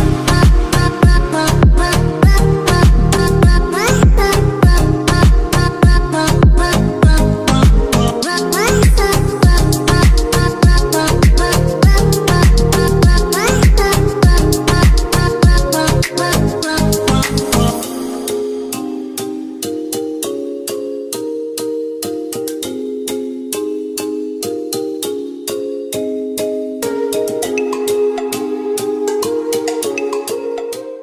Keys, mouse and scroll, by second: 0.3 click, 0.4 click.